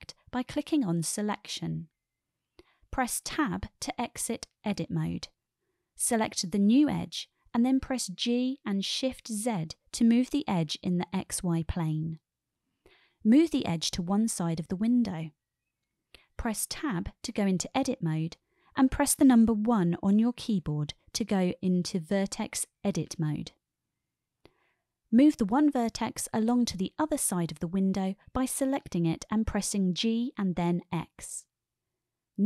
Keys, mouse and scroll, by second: 4.4 Tab, 7.8-8.5 shift+middle drag, 10.1 g, 10.7 shift+z, 18.2 click, 18.8 Tab, 20.9 1, 21.9-23.8 drag, 26.4-26.9 drag, 28.5-29.1 shift+middle drag, 30.7 g, 31.3 x.